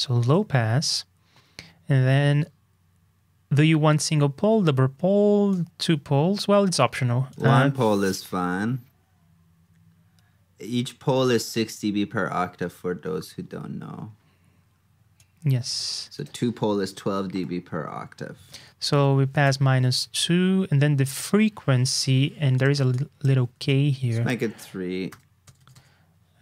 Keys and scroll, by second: 0.2 super+Tab, 18.4 super+Tab, 23.5 super+Tab.